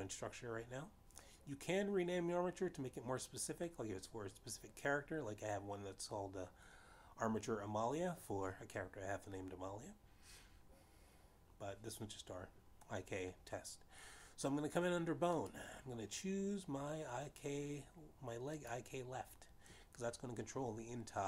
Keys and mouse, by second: 17.1 click, 20.3 click.